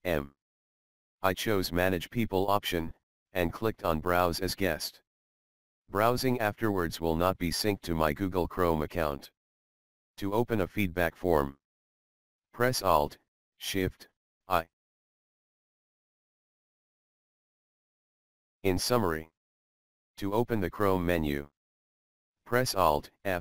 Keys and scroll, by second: 3.5 Down, 4.5 Return, 14.4 alt+shift+d.